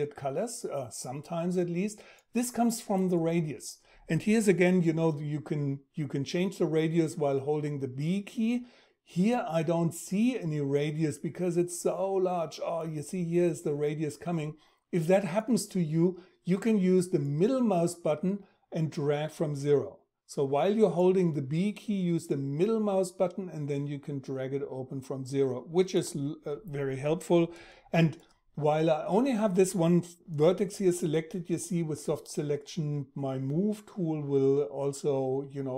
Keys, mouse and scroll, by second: 6.7 b, 16.5 b.